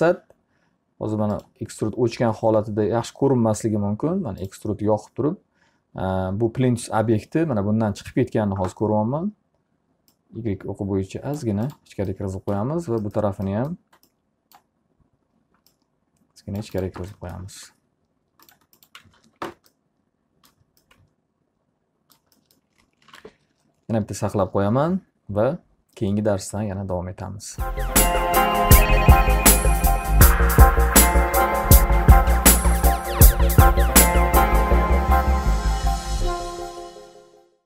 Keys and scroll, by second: 19.2 alt+a, 19.8 q, 23.6 ctrl+s.